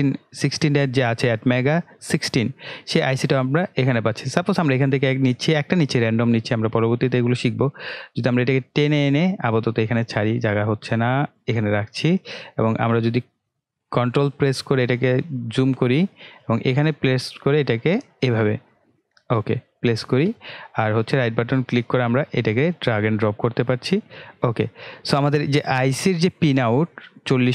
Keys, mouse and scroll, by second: 6.3-12.6 drag, 12.6-13.1 ctrl+scroll down 1, 14.7-21.0 middle drag, 21.0-23.0 right drag, 23.0-23.8 ctrl+scroll up 1, 24.1-24.4 ctrl+scroll down 1, 25.6-27.5 drag.